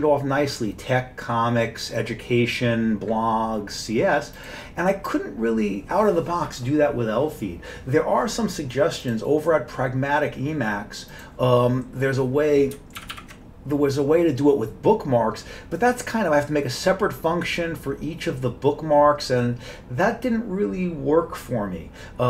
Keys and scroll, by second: 13.0 ctrl+=, 13.1 ctrl+=.